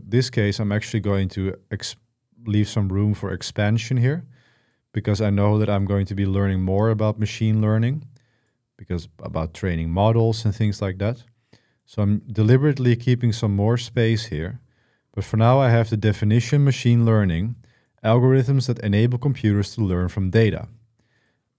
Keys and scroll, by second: 14.1 typing.